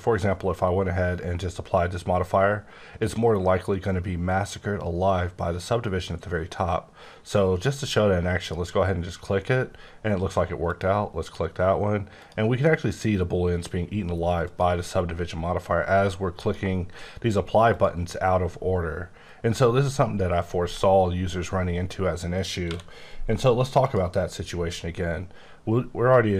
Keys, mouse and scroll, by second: 8.4 click, 10.6 click, 12.1 click, 14.4 click, 16.3 click, 20.6 right click, 22.6 q, 23.8 click.